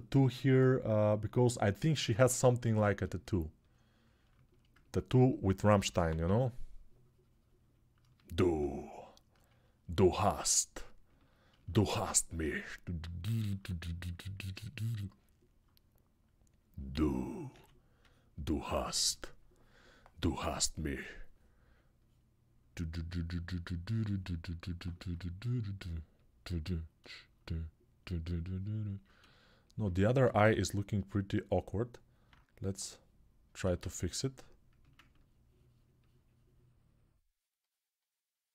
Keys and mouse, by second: 5.6 p, 5.8 [, 6.0 [, 17.2 s, 18.8 ctrl+z, 26.8-33.9 alt+shift+drag, 33.4 ctrl+z, 33.9-34.9 middle drag, 34.9-38.5 ctrl+drag.